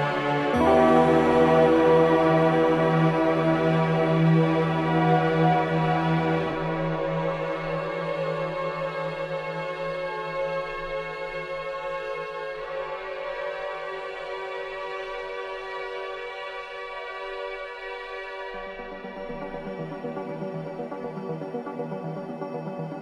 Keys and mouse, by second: 0.5 click, 1.5 g, 1.8 click, 3.2 click, 3.6 space, 4.8 space, 5.3 click, 6.3 g, 6.8-8.1 drag, 7.6 space, 8.8 space, 9.6 click, 10.5 g, 10.9 click, 11.3-12.8 drag, 12.9 space, 16.5 space, 17.8-20.9 drag, 20.4 space.